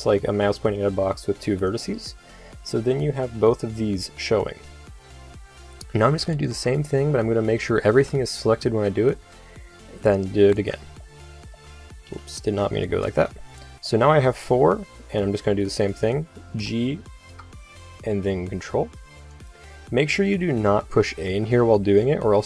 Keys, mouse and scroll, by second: 6.0-7.7 drag, 6.2 a, 6.4 a, 7.7 a, 7.9 a, 8.6 shift+d, 10.7-11.8 middle drag, 12.0 KP_8, 12.4 KP_7, 16.5 g, 17.2 g, 21.5 a, 21.7 a, 22.1 a.